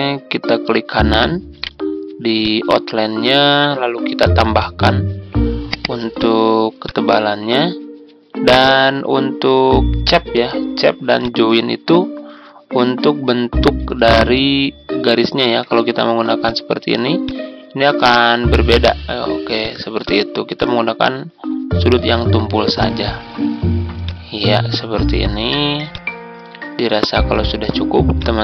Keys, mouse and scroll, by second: 1.5 right click, 2.3-9.6 drag, 11.1 ctrl+click, 12.4-12.8 ctrl+scroll up 1, 14.6-14.9 ctrl+scroll up 1, 16.3 click, 21.6-22.0 ctrl+scroll down 1, 22.3-23.9 ctrl+scroll down 1, 23.9 click, 26.7 ctrl+scroll down 1, 28.1 click.